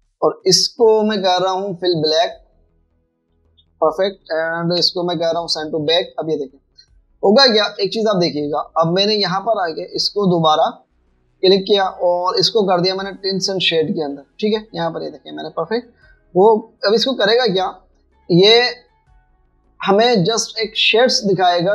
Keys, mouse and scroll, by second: 0.0 v, 4.4 v, 5.2 v, 5.7 ctrl+shift+[, 7.0 v, 8.7 shift+click, 12.1 double click.